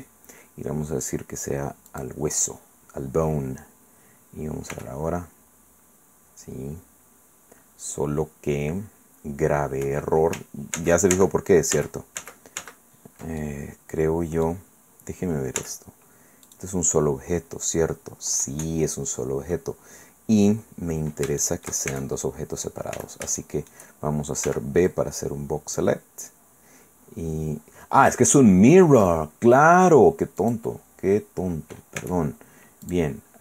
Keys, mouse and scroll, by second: 1.9 click, 4.7 r, 9.8 Escape, 10.7 ctrl+z, 13.4-14.6 ctrl+drag, 14.6 middle click, 15.6 z, 16.5 right click, 18.0-18.3 scroll up 1, 18.9 scroll down 1, 21.4 shift+right click, 21.9 shift+middle click, 21.9 shift+Tab, 22.9 a, 23.4 shift+middle click, 24.4 b, 24.9-26.0 drag, 30.4 click, 32.0 Tab, 32.8 click.